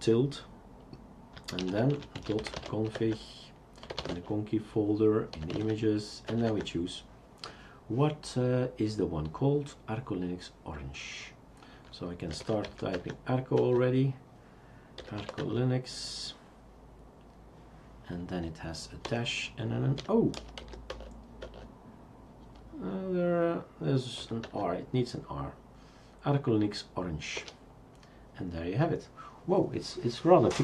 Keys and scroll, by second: 1.6-6.0 typing, 6.3 Tab, 6.5 Tab, 12.1-13.1 typing, 13.6 Tab, 14.7-15.7 typing, 19.0 typing, 20.9 Tab, 20.9 typing, 21.4 Tab, 24.2 typing, 24.4 Tab, 27.4 Return.